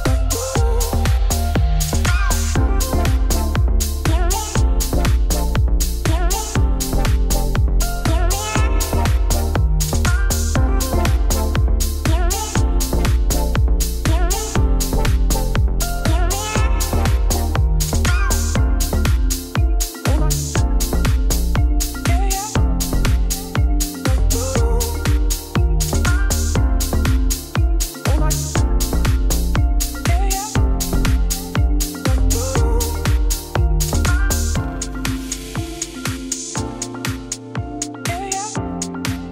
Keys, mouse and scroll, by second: 3.1-4.2 scroll down 3, 4.2-4.7 scroll down 2, 5.2 click, 11.6 click, 12.3 KP_Divide, 12.5 scroll down 1, 12.8 click, 13.0-14.0 middle drag, 14.0 scroll up 1, 14.4 click, 16.1 click, 16.8 middle click, 17.0 scroll up 4, 17.4-18.6 middle drag, 18.6 click, 19.2 a, 19.5 a, 19.7 b, 21.0 Tab, 21.5 scroll up 2, 21.6 shift+middle click, 22.2 KP_Divide, 22.4 middle click, 22.7 3, 22.8 click, 23.9 x, 24.1 middle click, 24.9-26.0 scroll down 1, 26.0 click, 26.5 2, 26.7 click, 26.9 shift+click, 27.7 u, 27.8 middle click, 28.2 click, 28.4 shift+click, 29.0 u, 29.5 middle click, 30.3 click, 31.3 u, 32.8-33.9 middle drag, 33.9 r, 34.7 scroll down 1, 34.8 Tab, 35.2 KP_Divide, 35.6-36.1 scroll down 5, 36.1 shift+middle click, 36.6-37.0 scroll up 2, 37.0 Tab, 37.4 s, 38.2 Tab, 38.4 scroll down 3, 38.6 ctrl+s.